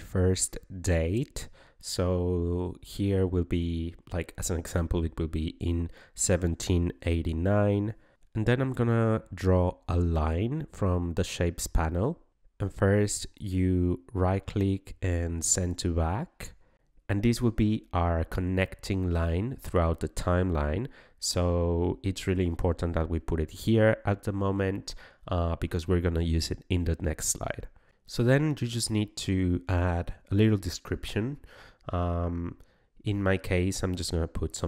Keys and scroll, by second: 0.0-0.6 typing, 1.9 ..